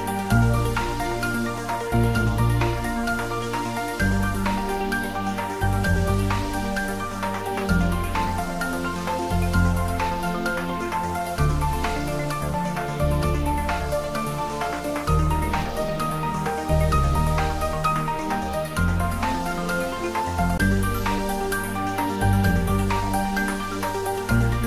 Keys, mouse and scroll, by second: 4.2 click, 6.5-6.9 scroll down 1, 10.3 s, 12.7 click, 13.7-15.4 scroll up 1, 15.4-17.6 middle drag, 17.6 scroll down 1, 24.4-24.6 scroll down 1.